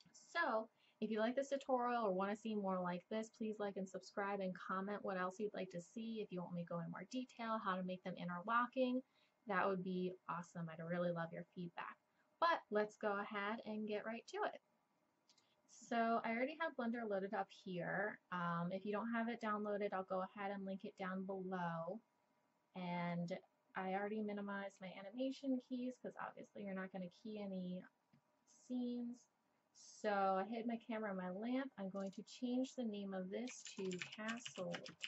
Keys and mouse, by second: 32.0-34.5 drag.